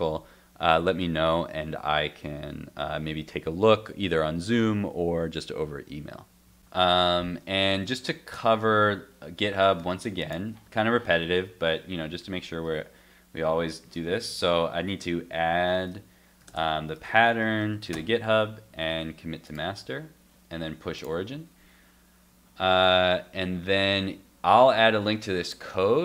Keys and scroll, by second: 6.9 super+Tab.